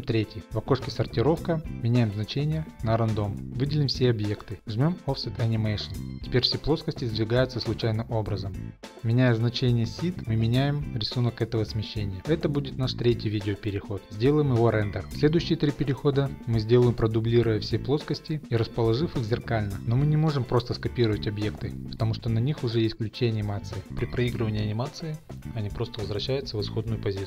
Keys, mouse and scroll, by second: 0.8 click, 2.7 click, 2.9-3.3 scroll, 3.8 click, 5.3 click, 9.6 Left, 9.6 click, 9.8 click, 10.6 click, 14.1 click, 14.2 click, 14.7 click, 15.2 click, 16.4 Left, 16.4 click, 16.9 scroll, 17.7 middle click, 18.4 scroll, 19.2 middle click, 21.3 click.